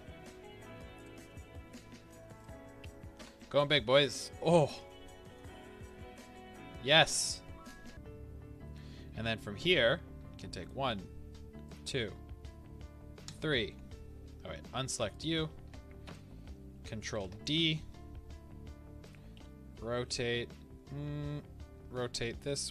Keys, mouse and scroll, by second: 1.0 click, 1.6 s, 2.4-3.2 drag, 4.2-4.6 scroll, 5.2-10.6 middle drag, 5.8 scroll, 10.6 shift+click, 16.0 KP_7, 17.1 shift+d, 19.1 click, 19.4 r.